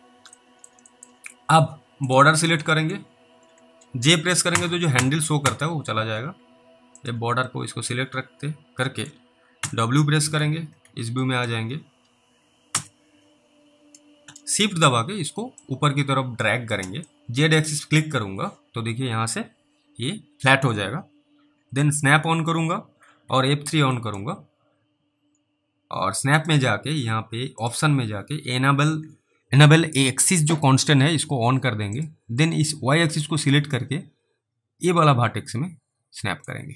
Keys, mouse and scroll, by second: 0.0 scroll up 1, 0.6 alt+middle click, 1.0 middle click, 2.1 click, 2.9 middle click, 4.5-5.5 typing, 7.0 click, 7.8 alt+middle click, 9.7 typing, 10.4 alt+w, 10.9 alt+w, 11.5 middle click, 11.9 scroll up 1, 12.7 F3, 13.2 scroll up 1, 15.9 shift+click, 17.2 middle click, 17.9 click, 22.0 s, 23.3 F3, 24.3 middle click, 26.4 right click, 27.6 click, 31.9 click, 33.5 click.